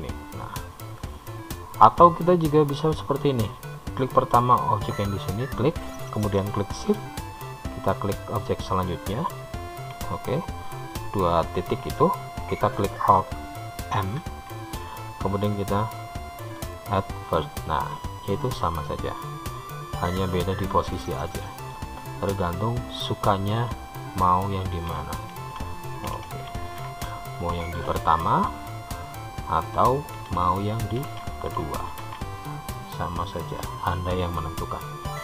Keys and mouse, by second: 4.8 click, 9.0 shift+click, 14.3 alt+m, 20.3-22.1 middle drag, 23.1-24.5 drag, 28.1 alt+m, 33.0 alt+m.